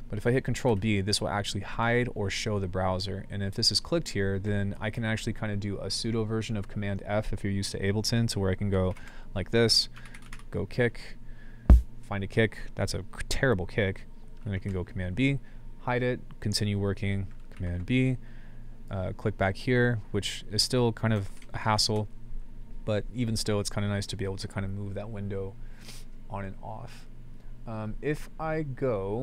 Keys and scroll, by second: 0.7 ctrl+b, 2.0 ctrl+b, 5.0 ctrl+b, 8.9 ctrl+b, 9.7-10.8 typing, 14.5 ctrl+b, 17.6 ctrl+b, 21.2-21.9 typing.